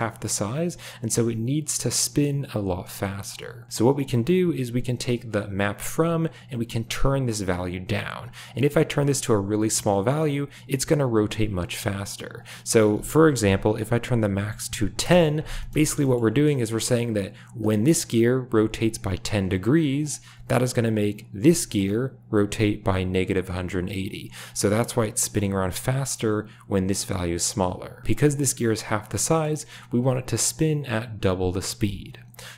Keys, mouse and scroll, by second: 0.0 shift+middle click, 4.1 shift+middle click, 6.2-8.1 drag, 8.4-10.0 drag, 12.3-15.0 drag, 15.6 space, 16.0 shift+click, 17.5 click, 18.3 r, 20.0 click, 21.3 g, 28.1 r, 29.2 shift+middle click.